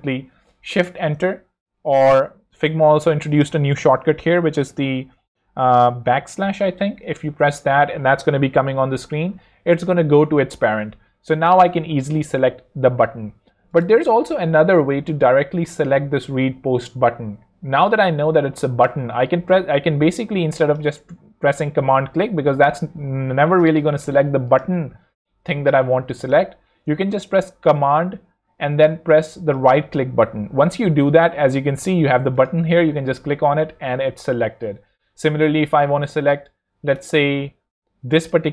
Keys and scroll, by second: 0.7 shift+Return, 6.1 \.